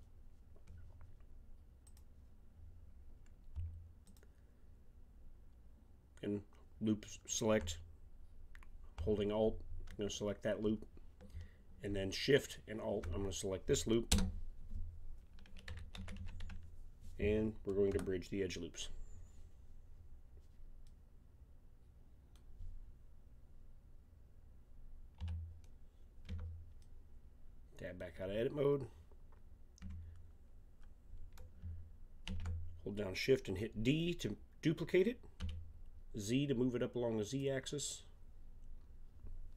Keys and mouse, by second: 1.8-3.7 drag, 4.0-5.9 drag, 12.4-14.0 drag, 14.1 space, 25.2 a, 26.2 Tab, 32.2 shift+d.